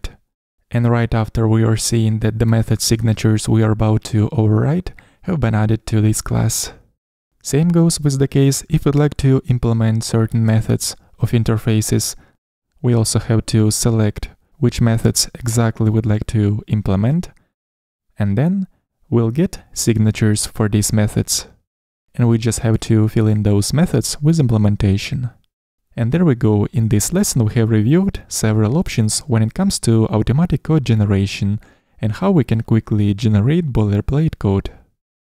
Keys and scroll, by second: 1.5 Down, 11.8 super+n, 18.7 Down, 19.9 Escape, 26.8 Escape.